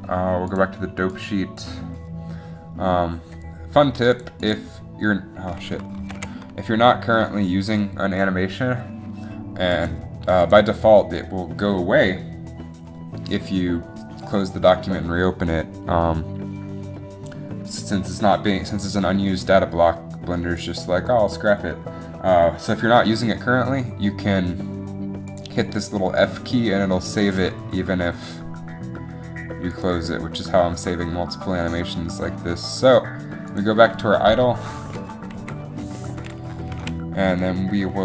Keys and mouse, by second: 2.7 a, 4.3-5.3 drag, 8.1 ctrl+z, 9.9 click, 11.2 ctrl+z, 25.4 click, 29.8-31.6 drag, 35.5 shift+Left, 36.9 a.